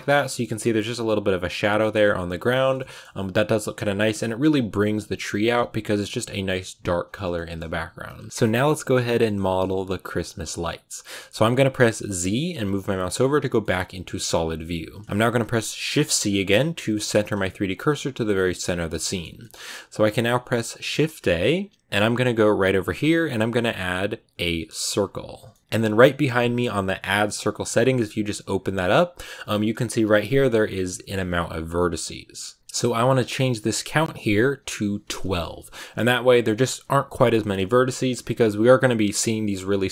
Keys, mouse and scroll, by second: 0.1-2.4 shift+middle drag, 2.4 scroll down 2, 2.6-8.0 shift+middle drag, 8.0 scroll up 1, 8.2-12.7 shift+middle drag, 12.7 z, 13.5 middle click, 14.1-14.4 scroll down 3, 15.8 shift+c, 16.2 click, 16.4 shift+c, 16.8 middle click, 17.2 shift+c, 17.7 click, 17.8 shift+c, 18.2 shift+middle click, 18.5-18.9 scroll up 1, 18.9-24.9 shift+middle drag, 25.4-35.4 middle drag, 35.4-39.9 drag.